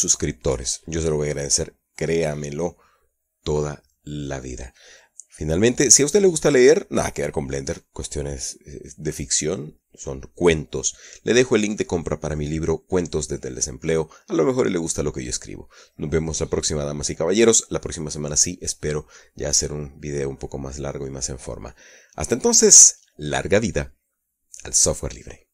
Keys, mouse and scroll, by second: 5.4-7.0 middle drag, 7.0-8.2 middle drag, 8.3 middle click, 10.8 middle click, 14.8-15.7 middle drag.